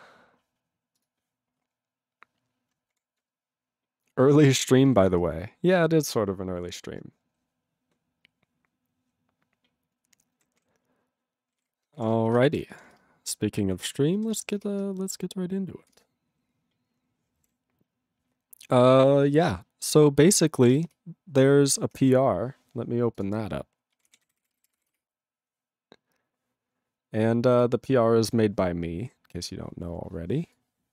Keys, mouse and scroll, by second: 1.0 click, 4.8 ctrl+b, 5.1 ctrl+f, 10.4 ctrl+n, 10.5 ctrl+p, 16.4 Return, 17.5 ctrl+=, 20.7 ctrl+g.